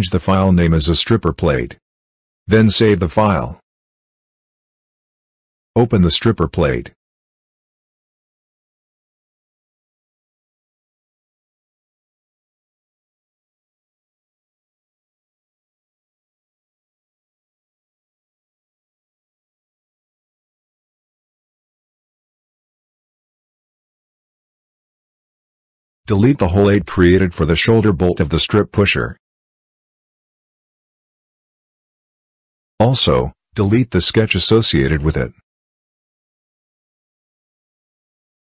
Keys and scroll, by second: 0.0-0.7 typing.